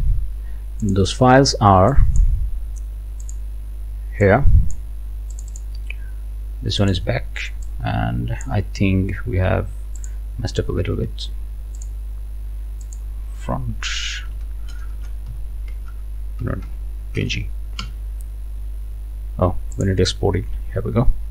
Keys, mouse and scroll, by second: 0.9 click, 1.9 click, 3.3 click, 4.2 click, 5.3 click, 6.8 click, 7.6-8.6 drag, 10.0 click, 11.8 click, 12.8 click, 13.9-17.7 typing, 17.8 Return, 19.7 click.